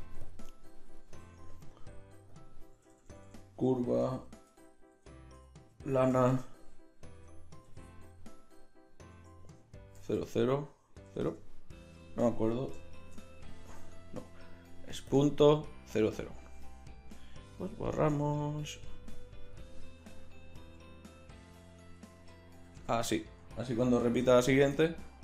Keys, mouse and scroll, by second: 2.9 BackSpace, 3.0 BackSpace, 10.2 KP_0, 13.0 shift+d, 15.0-16.2 drag, 17.4 x, 18.4-20.8 drag, 24.5 shift+d.